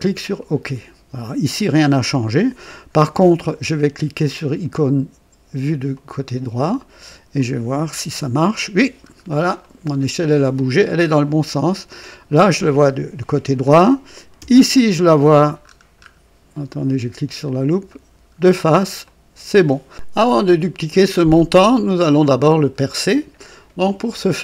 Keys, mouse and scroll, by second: 0.3 click, 5.9 click, 7.3 click, 8.0 KP_3, 9.0-9.4 scroll down 2, 9.5-10.4 right drag, 11.5-12.1 right drag, 14.3 KP_1, 15.1-16.2 scroll down 4, 17.4 click, 18.3 scroll down 1, 19.0-19.7 right drag, 20.4 click, 21.9 click.